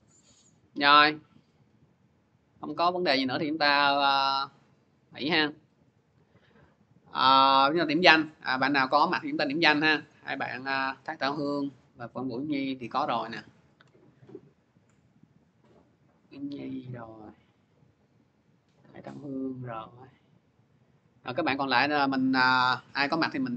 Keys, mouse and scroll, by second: 2.2 click, 3.0 click, 4.1 click, 6.0 click, 6.9 click, 9.9 click, 12.5 click, 13.3 click, 14.0 scroll down 2, 14.7 scroll down 1, 14.9 scroll, 16.6 click, 17.2 x, 17.6 click, 20.5 click, 20.6 x, 21.0 click, 21.6-22.3 scroll.